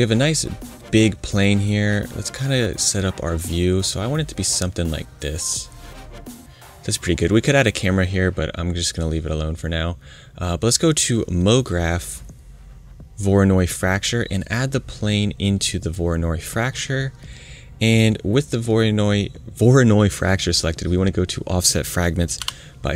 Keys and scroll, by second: 22.3 5.